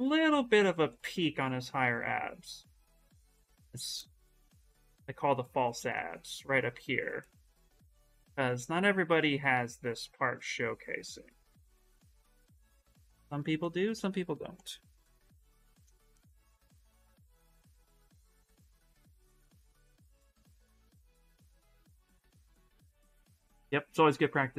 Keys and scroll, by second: 7.2-8.6 typing.